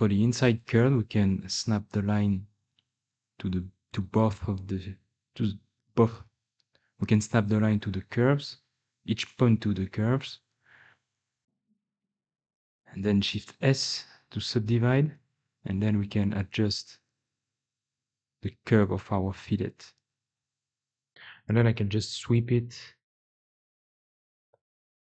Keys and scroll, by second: 1.6 g, 4.8 g, 11.0 g, 12.6-15.0 typing, 22.3 2.